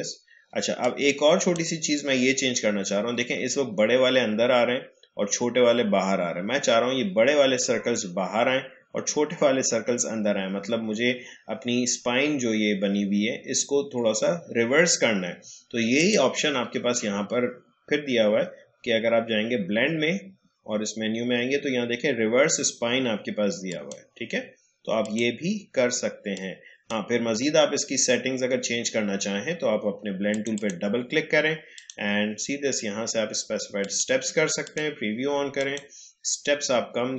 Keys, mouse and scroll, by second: 15.9 click, 23.6-29.4 drag, 30.3 click, 36.2-37.1 scroll down 1.